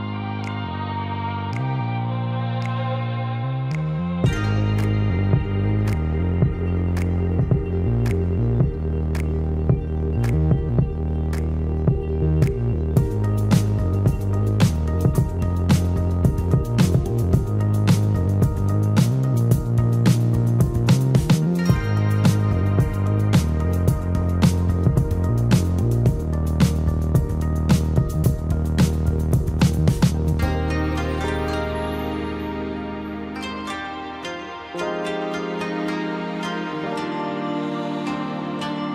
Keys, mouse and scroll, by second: 0.1 space, 0.3 Escape, 3.1 ctrl+g, 3.5 shift+click, 4.6 ctrl+g, 5.8 shift+middle click, 17.3 space, 18.2 shift+middle click, 24.8 Delete, 25.4 Delete, 30.6 alt+t, 35.8 shift+middle click.